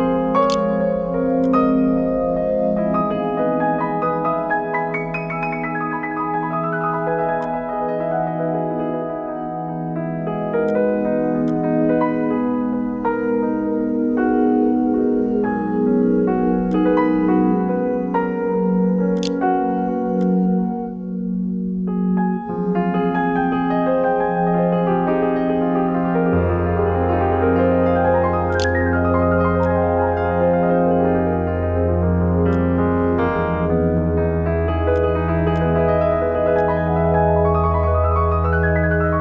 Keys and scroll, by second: 0.0 ctrl+s, 0.1 ctrl+e, 18.8 e, 19.4 ctrl+1, 27.8-28.7 typing.